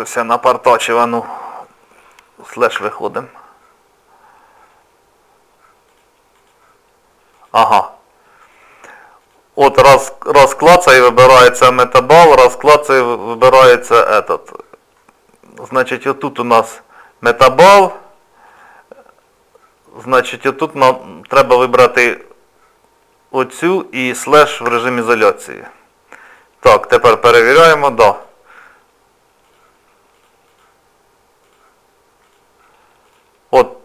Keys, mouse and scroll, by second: 2.8 KP_Divide, 5.9-15.0 click, 15.0 middle click, 15.8 click, 24.7 KP_Divide, 26.2 click, 27.3 click.